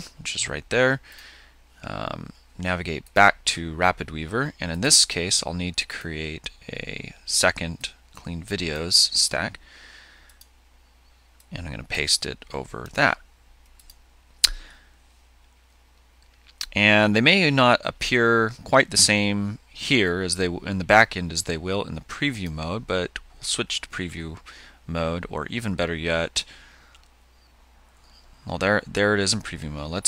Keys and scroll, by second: 0.2 super+c, 13.4 super+v.